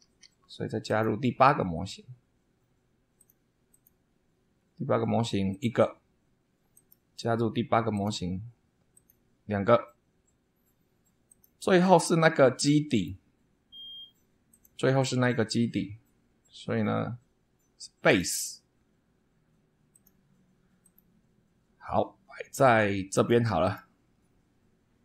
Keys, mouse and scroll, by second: 0.0 super+2, 0.8 click, 3.1 click, 3.7 click, 4.6 scroll down 2, 5.5 click, 6.7 click, 7.9 click, 8.9 click, 11.2 click, 11.7-12.0 scroll down 1, 12.1-13.2 middle drag, 14.5 click, 18.0 click, 19.9 click, 20.8 click, 23.1 click, 23.6 click.